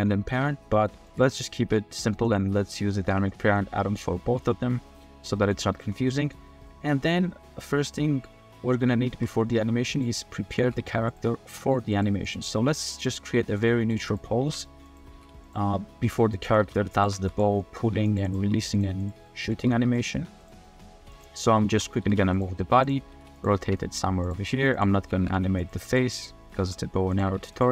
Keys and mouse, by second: 1.6 r, 2.5 middle click, 3.5-4.0 drag, 4.2 r, 5.3 drag, 5.8 r, 6.6-7.1 drag, 8.9 shift+drag, 9.3 middle click, 9.9 middle click, 10.3 middle click, 10.6 r, 11.4 g, 12.2 click, 12.6 click, 13.4 g, 14.4 g, 15.0 r, 15.1 z, 16.3 drag, 16.6-18.4 typing, 17.6 click, 18.2 click, 19.2 drag, 19.6 r, 19.8 r, 20.1 r, 20.6 drag, 21.2 click, 21.6 shift+click, 22.0 r, 22.0 z, 22.8 click, 23.1 r, 23.1 z, 23.6 shift+middle drag, 25.1 r, 25.2 z, 26.2-26.5 drag, 26.6 r, 27.3 r, 27.4 r.